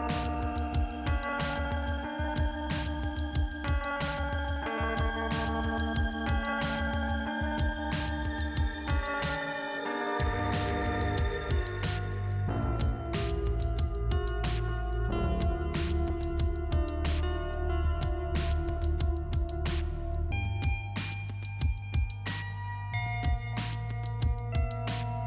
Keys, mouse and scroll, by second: 1.0 click, 2.4 click, 4.1 click, 5.7 click, 9.5 click, 11.7 click, 17.1 click, 18.6 click, 21.2 click, 22.7 middle click, 24.2 click.